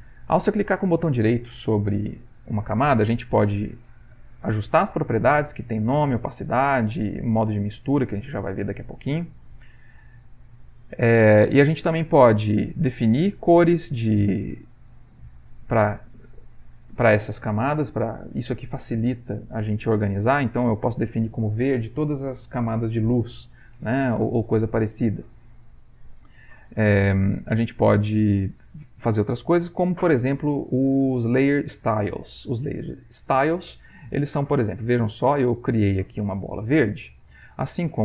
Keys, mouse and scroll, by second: 0.0 click, 1.0-4.0 right drag, 9.4 click, 10.4-13.1 right drag, 13.1 middle click, 14.3 right click, 15.1 middle click, 16.6 click, 25.4 click, 25.9-27.4 right drag, 32.6 right click, 33.5-36.6 drag, 37.8-38.0 right drag.